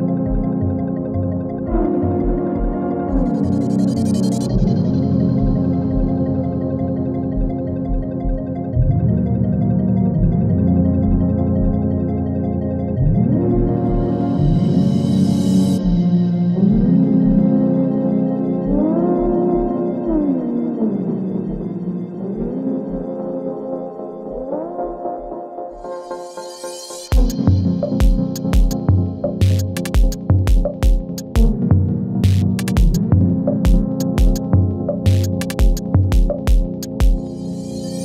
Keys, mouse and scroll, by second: 2.0 p, 2.9 click, 3.7 -, 4.7 space, 6.5 click, 7.6 space, 9.3 v, 10.1 click, 10.1-11.4 drag, 19.4 ctrl+z, 20.5-21.1 drag, 25.7 ctrl+d, 26.4-27.6 drag, 29.3 u, 30.1-38.0 drag, 33.8-34.8 drag, 36.9-37.9 click.